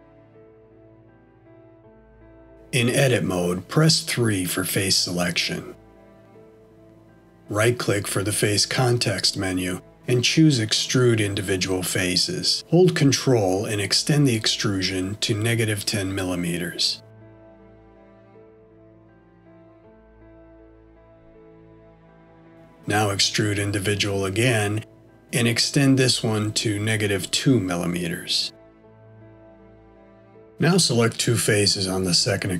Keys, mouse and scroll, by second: 2.7 Tab, 5.0 3, 10.0 right click, 21.5-23.3 scroll down 6, 23.6 middle click, 25.8 right click.